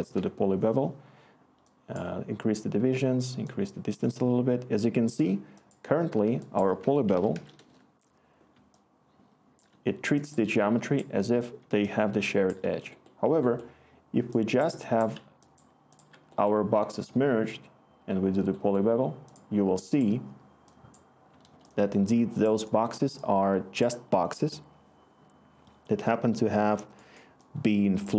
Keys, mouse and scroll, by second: 0.0-0.3 typing, 6.8 Tab, 6.8-7.9 typing.